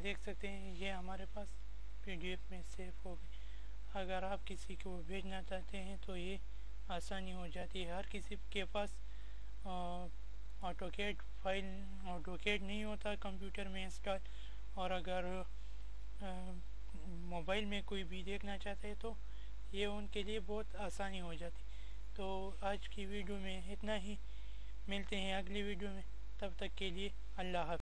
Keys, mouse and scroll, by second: 6.7 click.